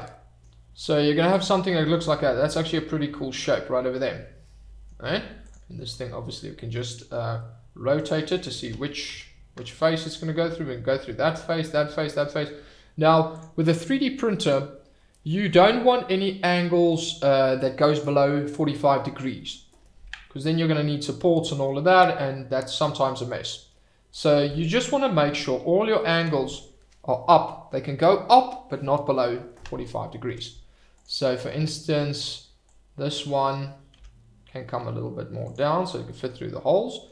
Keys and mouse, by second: 0.1-0.4 middle drag, 1.9 shift+right click, 3.5-3.9 middle drag, 4.5-4.8 middle drag, 5.4 click, 6.7-7.1 middle drag, 7.3-8.1 middle drag, 8.6 r, 9.1 z, 10.0 drag, 10.3-12.1 middle drag, 13.3 click, 14.4 click, 21.8-23.0 middle drag, 30.2 Tab, 31.6 Tab, 32.7 click, 33.9 g, 35.4 click.